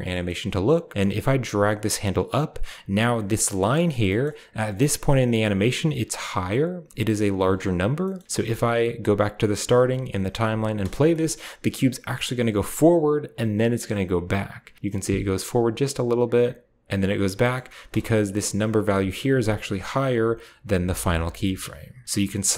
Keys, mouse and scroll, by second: 0.9-2.1 drag, 3.0-3.9 scroll up 1, 3.9-4.9 middle drag, 3.9-4.9 scroll up 1, 4.5-4.9 drag, 7.6-8.8 scroll down 1, 7.8-8.8 middle drag, 8.8-9.7 drag, 8.8 scroll down 1, 10.5 space, 10.8-11.3 shift+scroll down 2, 11.3 scroll up 2, 12.1-12.7 shift+middle drag, 12.7-13.3 scroll up 1, 14.7-16.1 drag, 17.5-18.5 scroll up 2, 17.6 space, 17.9-18.7 drag, 19.3-22.0 drag, 21.1-22.0 scroll down 1, 22.4-22.5 right drag.